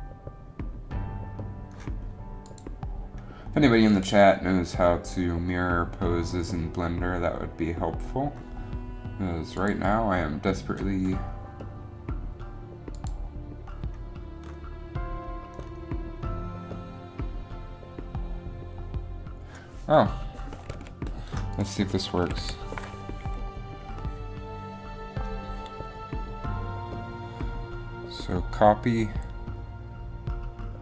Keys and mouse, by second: 22.4 a, 22.6 a, 27.0 a.